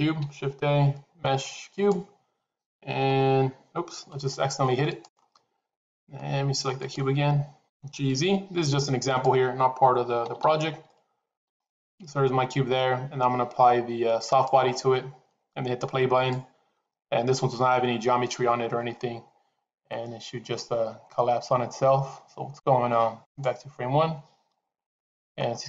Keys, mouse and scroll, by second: 0.1 shift+a, 2.8 h, 4.7 click, 6.6 click, 7.5 g, 10.1 g, 14.2 click, 23.6 click.